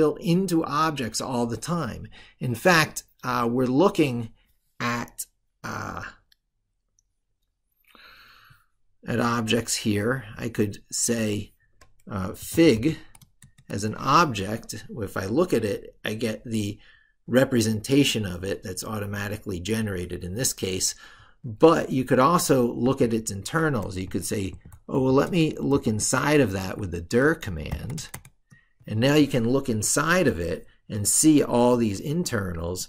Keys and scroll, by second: 26.5 ctrl+Right.